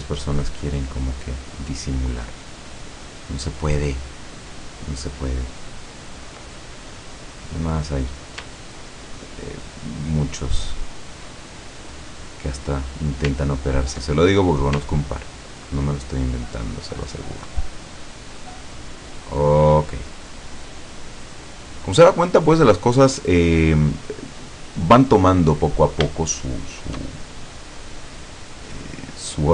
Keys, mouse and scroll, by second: 0.2 ctrl+click, 1.1 ctrl+click, 2.3 ctrl+click, 3.1 ctrl+click, 4.6 ctrl+click, 5.3 ctrl+click, 5.9 ctrl+click, 6.7 ctrl+scroll down 2, 7.0 middle click, 7.8-8.3 scroll up 2, 8.8 ctrl+click, 9.5 ctrl+click, 10.2 ctrl+click, 10.8 ctrl+click, 11.5-12.7 ctrl+scroll down 1, 12.8 scroll up 1, 13.5 ctrl+middle click, 14.3 ctrl+middle click, 14.5 ctrl+scroll up 1, 14.7 scroll down 2, 15.7 ctrl+click, 16.4 ctrl+click, 17.0 ctrl+click, 18.8-19.8 ctrl+drag, 19.9 ctrl+scroll down 2, 20.4 middle click, 21.2-21.7 scroll up 2, 22.6 scroll up 2, 23.3 scroll down 2, 24.1 scroll down 2, 24.6-24.9 scroll up 2, 25.7 middle click, 26.3 shift+middle click, 27.3-29.1 shift+middle drag.